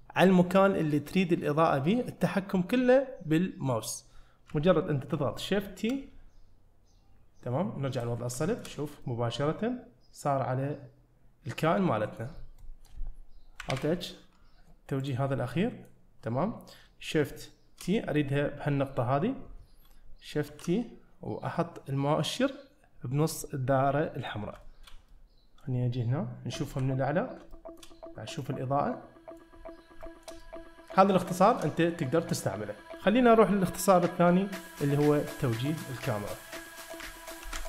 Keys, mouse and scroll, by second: 4.1-4.5 scroll down 1, 5.6 shift+middle drag, 8.0 click, 8.4 shift+middle click, 9.0-12.2 middle drag, 12.4 scroll down 1, 12.6 middle drag, 13.7 alt+h, 15.0 click, 15.5 middle click, 18.0 middle click, 20.5 shift+t, 24.6-25.1 shift+scroll up 3, 24.6 shift+middle drag, 25.1-25.7 middle drag, 26.5 `, 27.5 shift+middle drag, 28.0-28.4 scroll up 3, 28.4-29.4 middle drag, 29.6-30.3 scroll down 2, 30.4-31.0 middle drag, 31.4 shift+middle click, 31.8 scroll up 1, 31.9-32.3 middle drag, 32.7 middle click.